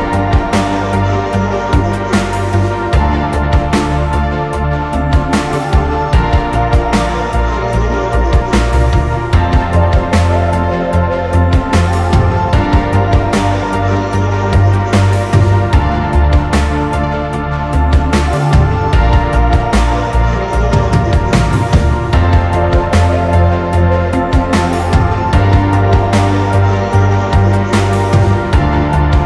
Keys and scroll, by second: 2.5 alt+[, 4.3 ctrl+-, 11.2 p, 22.9 F9.